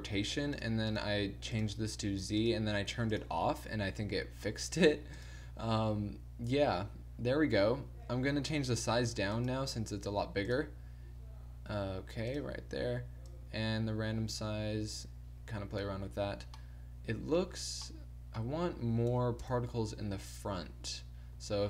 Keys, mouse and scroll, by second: 1.0-3.8 drag, 9.5-10.6 middle drag, 12.4-13.6 middle drag, 16.4 middle click, 18.1 middle click, 19.4 KP_0, 20.7 t, 21.4 t.